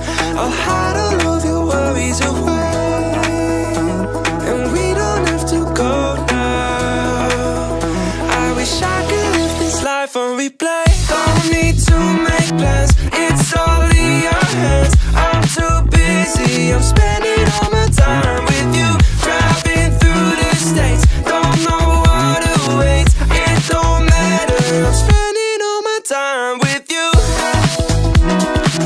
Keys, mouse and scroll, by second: 0.0 shift+a, 3.0-4.0 middle drag, 4.7-6.0 middle drag, 6.5 shift+a, 13.4-14.9 drag, 21.5 click, 22.2 click, 24.4-26.1 drag.